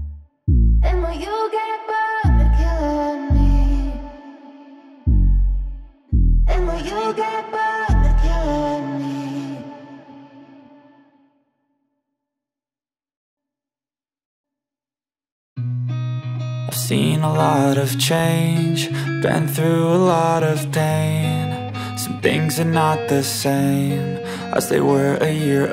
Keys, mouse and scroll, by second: 4.1-15.7 drag, 17.0 click, 17.9 space, 17.9 scroll up 1, 18.6 alt+scroll up 1, 19.1 space, 19.2 click, 19.4 space, 19.7-25.7 drag.